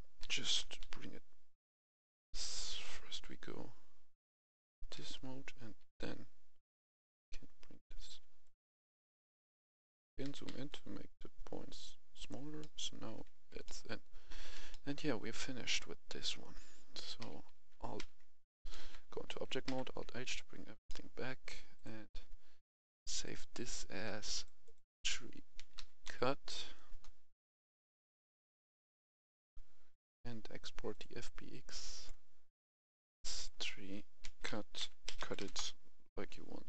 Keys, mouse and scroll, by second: 0.2 g, 0.7 z, 2.0 Escape, 2.6 Tab, 3.5-4.9 scroll down 1, 4.9 g, 5.7 z, 8.4 click, 10.2 scroll up 1, 10.2 g, 10.4 z, 12.1 click, 12.5 middle click, 13.3 Tab, 13.6 middle click, 13.8-14.2 scroll down 1, 14.2 a, 14.6 middle click, 14.8-15.3 scroll down 1, 15.3 middle click, 16.0-16.4 scroll down 1, 17.2 alt+h, 17.9 alt+h, 18.4 Escape, 18.8 Tab, 19.6 alt+h, 20.3-20.7 scroll down 1, 20.8 middle click, 21.0-21.7 scroll down 1, 21.7 click, 25.7 typing, 26.8 Return, 28.6-31.9 drag, 34.2-35.3 typing, 35.4 Return.